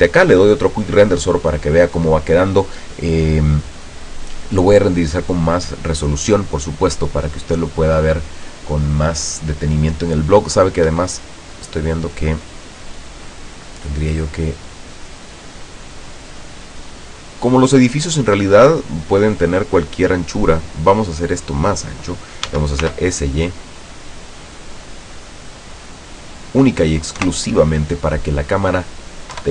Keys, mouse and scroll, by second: 11.0 Escape, 11.7 middle click, 12.2 scroll down 2, 12.5 right click, 13.0 right click, 15.1-16.1 middle drag, 16.7-18.9 drag, 22.6 s, 23.0 y, 25.8 click, 27.3 KP_0, 29.4 F12.